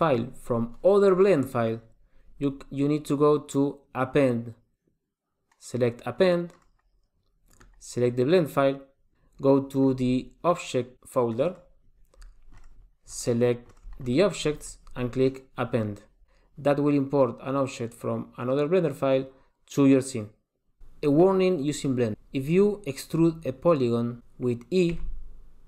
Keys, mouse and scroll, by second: 25.1 e.